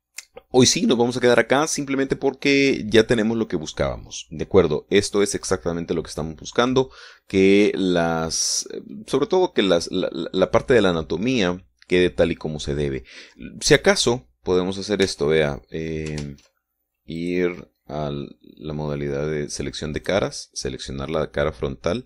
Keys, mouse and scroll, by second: 15.4-17.6 middle drag, 16.5 Tab, 17.7 ctrl+Tab, 18.7 click, 21.5 right click.